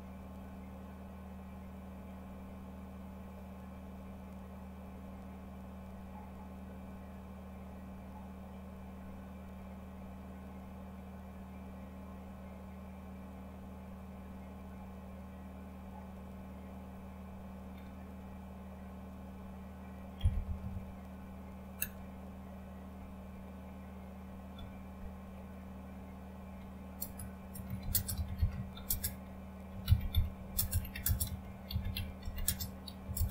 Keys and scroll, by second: 21.8 Return, 21.8 typing, 24.3-25.0 typing, 27.0-33.3 typing.